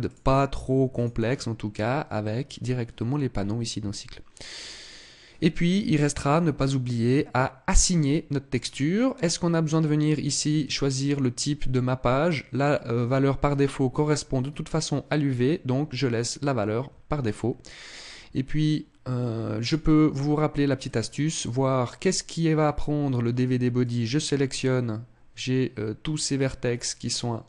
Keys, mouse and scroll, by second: 0.7 click, 8.2 click, 10.3 click, 13.7 click, 19.3 click, 20.5 click, 23.5 click.